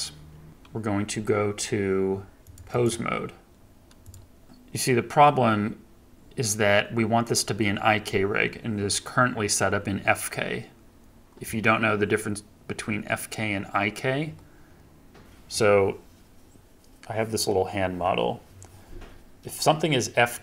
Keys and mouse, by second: 0.5 KP_3.